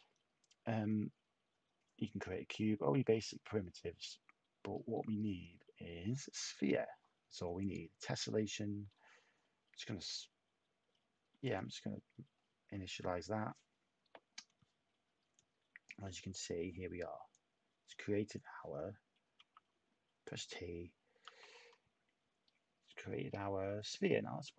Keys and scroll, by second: 19.3 t.